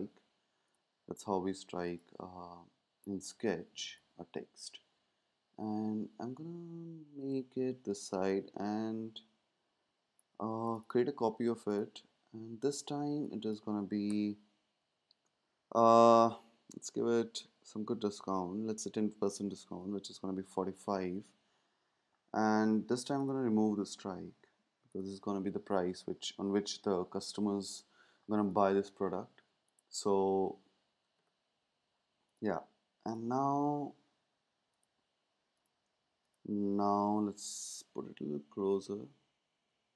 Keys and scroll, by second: 14.1 BackSpace, 19.4-20.3 typing, 31.1 ⟲, 37.9 shift+Left, 38.2 shift+Left, 38.9 shift+Right.